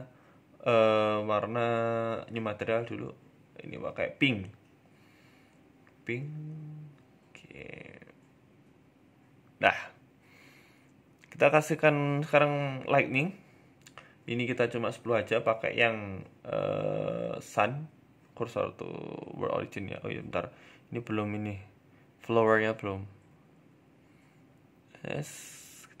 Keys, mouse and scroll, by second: 1.4 click, 1.8 click, 5.2 click, 8.0-8.3 scroll down 2, 8.2 middle click, 9.6-10.2 scroll down 2, 10.7 right click, 13.0 click, 16.0-17.0 scroll down 4, 16.5-17.8 scroll up 3, 17.0 shift+s, 18.8 shift+s, 20.0 shift+a, 21.2 s, 22.6 KP_0, 23.2-23.6 scroll down 10, 23.8 s, 24.8-26.0 scroll up 5, 25.0 shift+middle click, 25.4 shift+middle click.